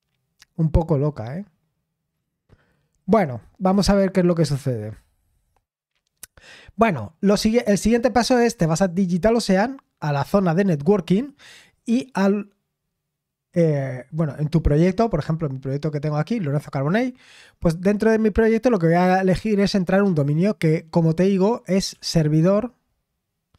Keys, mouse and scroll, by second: 0.4-3.0 scroll down 1, 3.0-6.4 scroll up 1, 6.4-8.4 scroll up 1, 8.4 click, 12.1 click, 18.6 click.